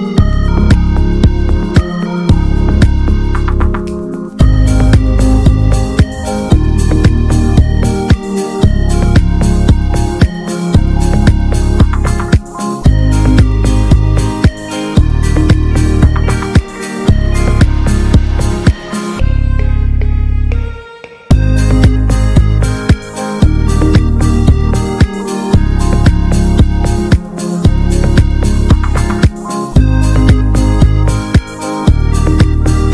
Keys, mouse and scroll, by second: 0.3 i, 3.7 middle click, 4.7 e, 8.6 middle click, 9.2 Tab, 9.3 drag, 9.5 click, 9.7 ctrl+a, 10.2 scroll down 1, 10.3 middle click, 10.5 scroll up 1, 10.7-11.4 middle drag, 11.4 ctrl+a, 11.9 middle click, 12.1 ctrl+s, 12.4 Tab, 12.7 middle drag, 12.9 scroll up 1, 13.1-14.0 shift+middle drag, 14.0 a, 14.3 middle click, 14.4-15.3 scroll up 3, 14.6 shift+middle click, 15.1 middle click, 15.3 shift+middle click, 15.7 ctrl+s, 15.9 click, 16.1-16.5 shift+middle drag, 16.5 shift+scroll up 1, 16.8 Tab, 17.3 middle click, 17.5 scroll up 1, 17.8-19.7 shift+middle drag, 19.7 2, 19.9 click, 20.6 ctrl+r, 21.3-22.0 scroll up 1, 22.0 h, 22.2 h, 22.5 ctrl+z, 23.0 g, 25.4 click, 26.5 e, 29.2 scroll down 2, 29.4-30.1 middle drag, 30.1 Tab, 30.2 click, 30.4-31.0 middle drag, 31.0 click, 31.1 ctrl+a, 31.5 Tab, 31.8 a, 32.2 middle click, 32.5 scroll up 1, 32.7-32.9 shift+middle drag.